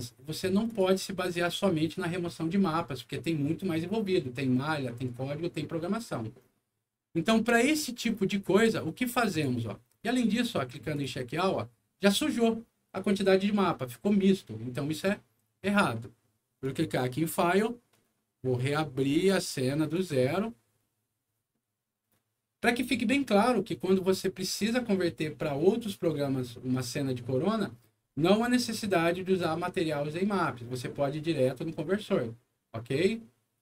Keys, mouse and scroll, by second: 0.6 click, 1.1 click, 7.7 click, 9.2 click, 10.9 click, 16.5 click, 19.1 click, 19.9 click.